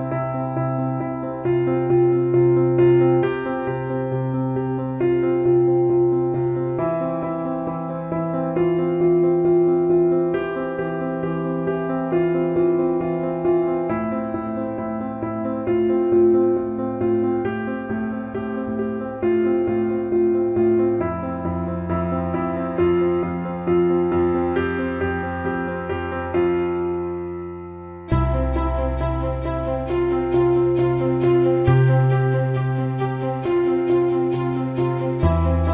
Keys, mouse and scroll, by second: 0.0-8.5 drag, 9.2 click, 10.4 ctrl+b, 12.7 middle click, 13.5 click, 14.5 alt+middle click, 15.0-15.6 right drag, 17.3 alt+middle click, 20.2 drag, 23.1 click, 24.0 drag, 26.8-27.9 drag, 29.3 Tab, 31.1-33.0 drag.